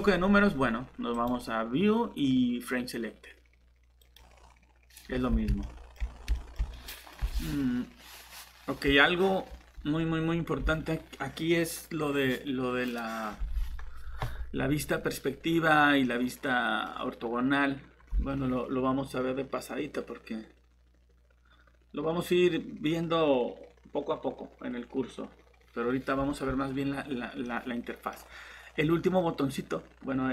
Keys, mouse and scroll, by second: 1.1 click, 5.1 scroll down 1, 5.6 middle click, 6.0 typing, 6.0 scroll down 1, 6.3 middle click.